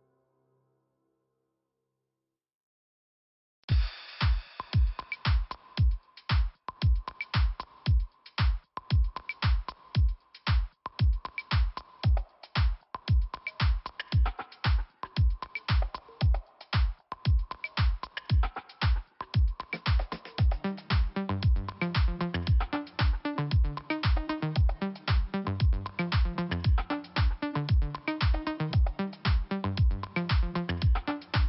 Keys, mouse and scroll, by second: 0.2 click, 0.3 click, 2.1 click, 7.1 middle click, 8.6 click, 11.1 click, 11.3 click, 12.4 click, 15.7 middle click, 16.5 click, 19.2 scroll down 2, 20.4 middle click, 21.8-22.9 scroll up 2, 23.1 middle click, 24.2 click, 27.0 middle click, 28.0 click, 28.5 click, 28.5 scroll down 2, 29.0 click, 29.9 middle click.